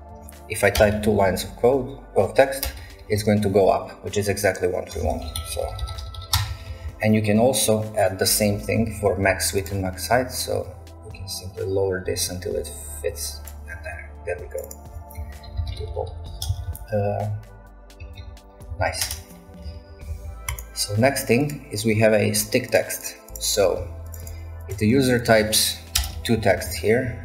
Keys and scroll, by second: 0.0-1.5 typing, 0.8 shift+Return, 2.6 shift+Return, 2.8 a, 3.0 a, 3.2 a, 5.0 ctrl+a, 5.1-7.1 typing, 14.9-20.1 typing, 18.8 ctrl+a, 23.3 typing, 26.0 Return, 26.2 a, 26.4 a, 26.5 a, 26.7 a.